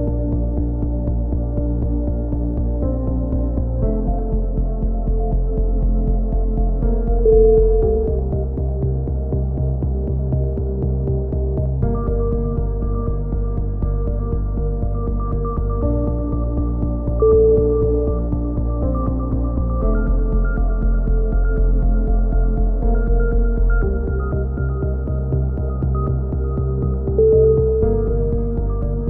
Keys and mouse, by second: 0.0 click, 0.7 right click, 1.1 KP_1, 1.2 z, 1.9 click, 3.6 ctrl+z, 3.6 click, 3.9 ctrl+z, 4.4 a, 4.6 right click, 5.0 click, 6.2 ctrl+z, 6.2 click, 6.6 right click, 6.9 click, 9.1 z, 9.2 a, 9.4 click, 10.6-15.5 typing, 10.8-12.8 drag, 13.1 click, 13.7 click, 15.1 click, 16.3-18.1 drag, 17.4 right click, 17.5 z, 18.1 KP_7, 19.0 ctrl+z, 19.3 click, 20.7 click, 20.7 right click, 22.1-23.9 typing, 22.5 ctrl+z, 24.0 click, 25.4 click, 25.5 right click, 26.1 middle click, 26.1 KP_7, 27.7 c, 28.2 middle click, 28.6 click, 28.6 right click.